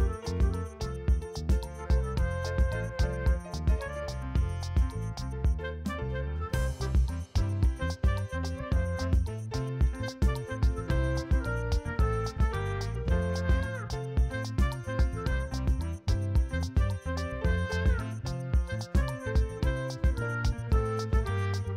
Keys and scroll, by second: 0.7 o, 2.2 o, 2.7 [, 9.2 ctrl+e, 10.5 ], 12.7 [, 14.3 v, 14.6 ctrl+space, 15.0 l, 20.6 BackSpace.